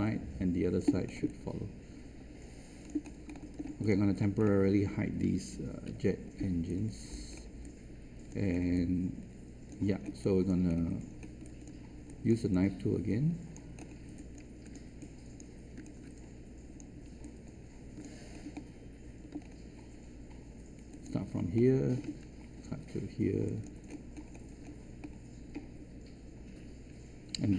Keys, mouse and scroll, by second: 1.0-1.3 scroll up 1, 1.3-2.8 alt+drag, 3.0-3.3 scroll up 1, 3.3 alt+middle click, 3.8 click, 4.4 alt+middle click, 5.5 h, 6.0-6.6 scroll down 1, 6.6-7.1 alt+scroll down 1, 7.2 scroll up 1, 7.6 alt+click, 8.4 scroll up 1, 9.1 alt+click, 10.1 alt+click, 11.0-11.4 scroll down 1, 11.4 alt+click, 12.0 alt+click, 12.5-13.7 right drag, 13.7 scroll up 1, 14.4 alt+click, 14.9 right click, 17.6 alt+click, 18.2 scroll up 1, 18.5 alt+middle click, 19.3-19.7 scroll up 1, 20.9 click, 21.5 alt+middle click, 23.4 click, 23.8-24.3 scroll down 1, 25.0 alt+middle click.